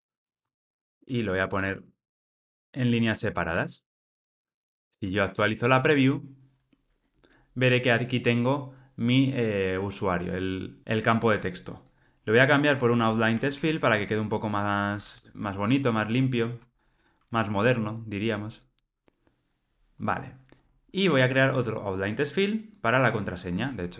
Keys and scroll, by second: 2.6 alt+Return, 15.5 Tab.